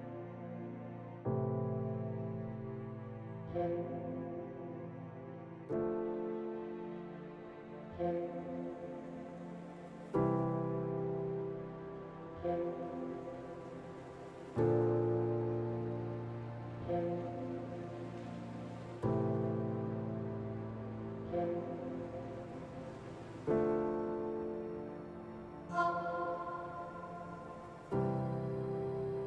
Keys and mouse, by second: 1.4 Tab, 3.0 click, 5.8 click, 6.0 click, 7.0 middle click, 8.5 Tab, 8.5 middle click, 9.2 Tab, 11.0 shift+middle click, 11.8 Tab, 12.4 q, 14.4 Tab, 16.0 click, 16.5 alt+z, 16.8 click, 18.0 x, 20.5 click, 22.5 x, 24.6 x, 26.9 3, 27.2 click.